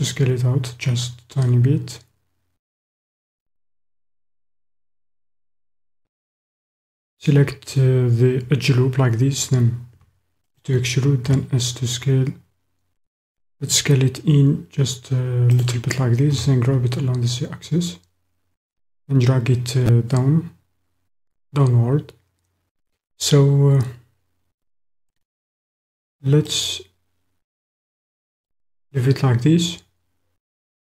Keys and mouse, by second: 3.3 click, 9.9 e, 10.6 click, 11.2 s, 15.5 click, 16.3 g, 16.8 z, 25.1 click, 26.4 click, 28.3-29.8 drag, 29.8-30.9 middle drag.